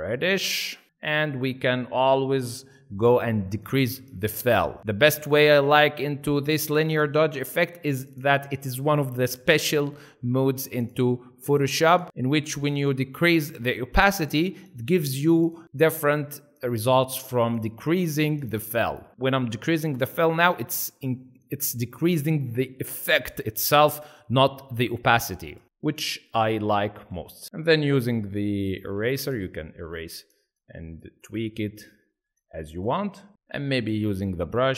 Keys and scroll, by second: 1.5 x, 27.4 ctrl+z, 27.8 ctrl+e, 29.0 ctrl+z, 32.2 alt+space, 33.3 alt+x, 34.5 alt+x.